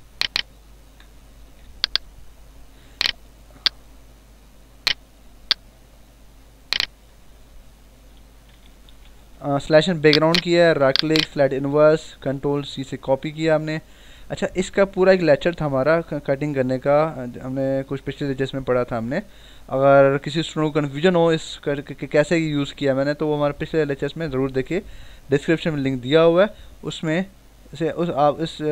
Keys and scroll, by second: 1.4 ctrl+alt+z, 7.8 ctrl+-, 9.1 ctrl+=, 12.0 ctrl+c.